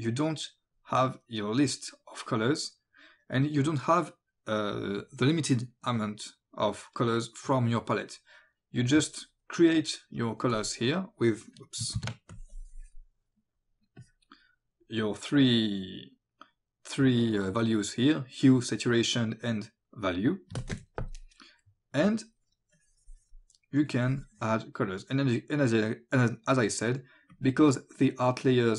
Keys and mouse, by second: 8.8 click, 10.5 click, 12.0 alt+b, 12.3 click, 14.0 click, 22.0 click, 23.9 click, 27.3 click.